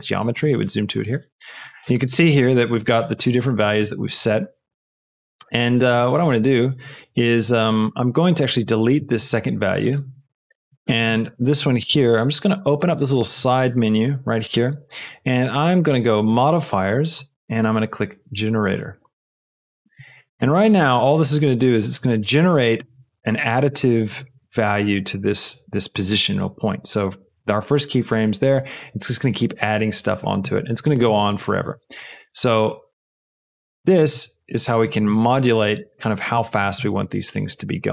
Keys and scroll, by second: 9.0 x, 34.1 space.